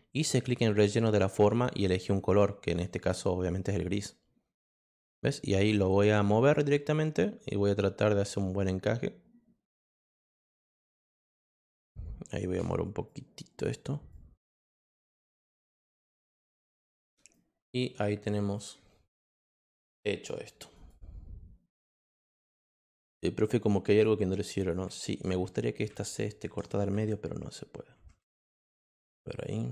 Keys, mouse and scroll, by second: 0.3 click, 3.0 click, 5.7-11.7 drag, 13.0 click, 14.1 click, 16.1 click, 17.3 click, 18.5 click, 20.7 click, 21.8 click, 23.9 click, 24.5 click, 29.4 click.